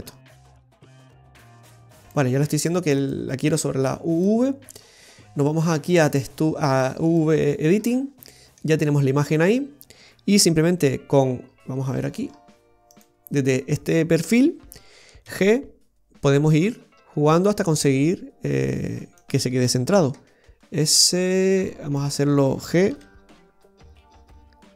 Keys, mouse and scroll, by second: 0.1-1.2 scroll up 5, 1.2 click, 3.1 click, 3.6 click, 6.0 click, 7.2 click, 7.8-8.3 scroll down 5, 8.3 middle click, 11.5-11.8 scroll down 1, 12.0 scroll down 11, 13.1 click, 13.1 scroll down 7, 15.4 g, 20.2 s, 23.0 g.